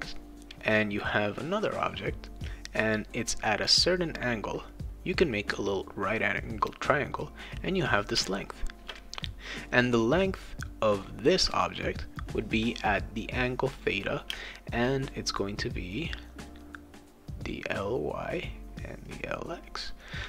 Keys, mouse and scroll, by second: 0.4 click, 1.0 click, 2.9 click, 4.1 click, 4.5 click, 4.9 click, 5.5 click, 5.8 click, 7.4 click, 8.2 space, 8.5 click, 9.5 click, 12.3 click, 12.5 click, 13.3 click, 14.3 space, 15.8 click, 17.3 click, 17.9 click, 18.7 click, 19.3 click, 19.5 click.